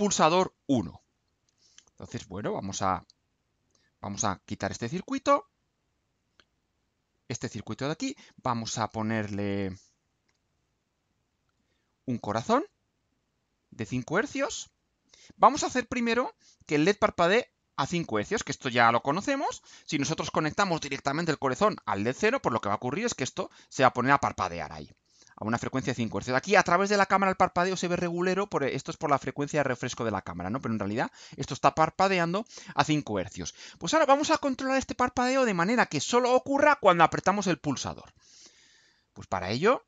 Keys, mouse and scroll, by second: 2.9 click, 4.2 click, 4.8-5.8 drag, 6.8 click, 9.2 click, 10.2 Delete, 11.0-11.7 drag, 14.3 click, 15.9 click, 16.6-17.6 drag, 17.8-18.8 drag, 19.6 ctrl+u, 39.5 click.